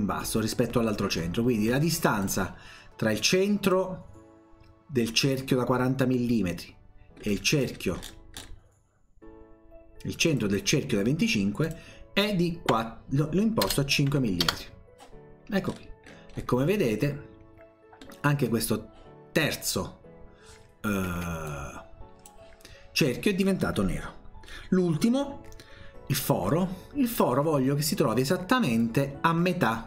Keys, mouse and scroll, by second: 2.2 click, 3.6 click, 7.2-7.6 scroll up 1, 7.6-8.6 scroll down 1, 10.3 click, 11.6 click, 13.7 BackSpace, 15.7-16.1 scroll down 1, 16.1-17.6 scroll up 2, 18.1 middle click, 18.4-18.9 scroll up 1, 21.2 Escape, 21.5 click, 28.8 click.